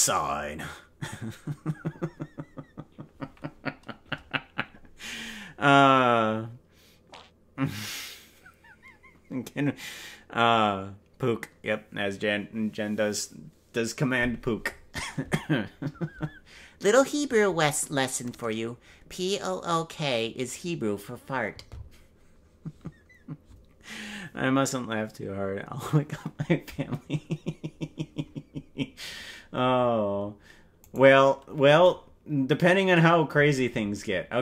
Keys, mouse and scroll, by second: 31.0 right click.